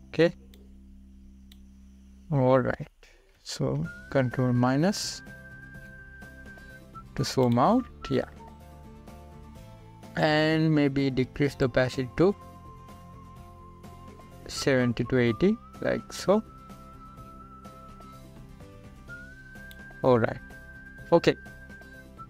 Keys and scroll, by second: 5.2 ctrl+=.